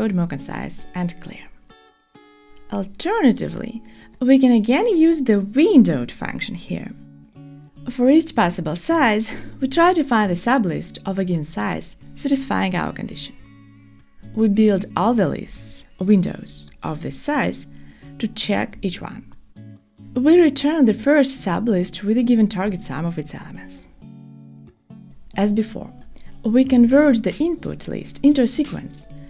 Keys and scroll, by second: 13.5 Return, 23.1 Return, 23.2 Escape, 25.4 Return.